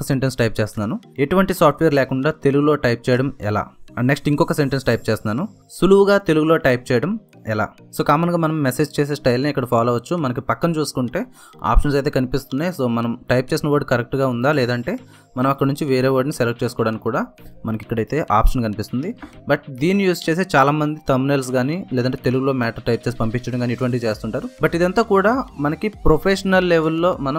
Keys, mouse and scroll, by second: 0.0-14.2 typing, 5.0 ctrl+a, 7.4 Return, 19.2 Return, 20.7 typing.